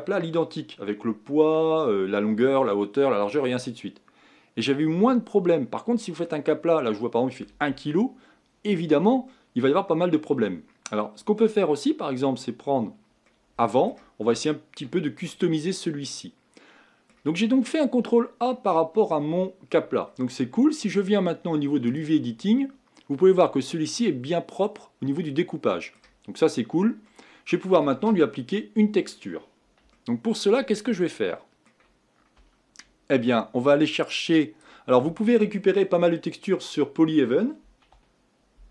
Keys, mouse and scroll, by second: 8.8-9.3 scroll down 2, 9.3-11.3 middle drag, 11.3-13.3 scroll up 1, 13.3-15.1 middle drag, 15.1-16.1 scroll up 1, 16.1-19.9 middle drag, 19.9-21.9 scroll down 1, 21.9-23.1 drag, 23.9-28.1 middle drag, 29.9-32.4 shift+middle drag, 34.1-38.2 drag.